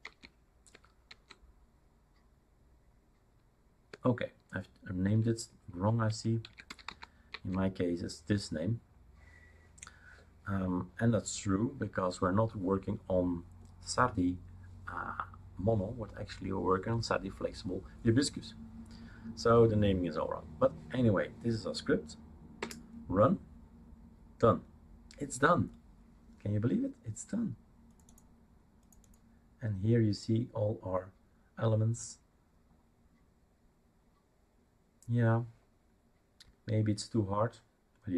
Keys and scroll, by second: 0.0 Tab, 0.7 BackSpace, 1.0 Tab, 3.9-7.3 typing, 22.6 Return.